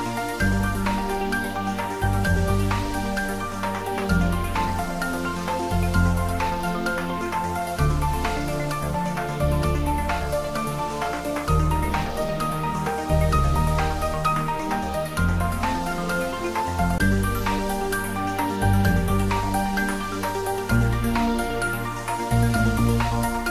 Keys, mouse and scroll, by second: 1.0 alt+shift+click, 5.6 alt+shift+click, 10.2 alt+shift+click, 13.9 ctrl+z, 16.9 alt+shift+click, 20.2-22.6 scroll down 2, 22.6 scroll down 1, 23.0-23.5 drag.